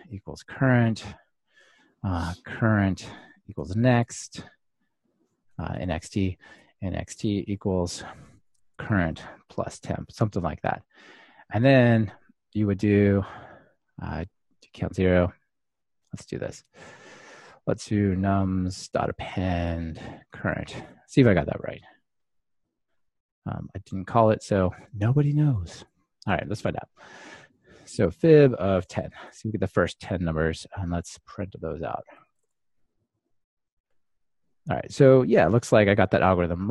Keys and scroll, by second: 4.6 Return, 8.9 Return, 21.0 Return, 22.0 ctrl+r, 29.3 ctrl+r, 33.7 ctrl+r.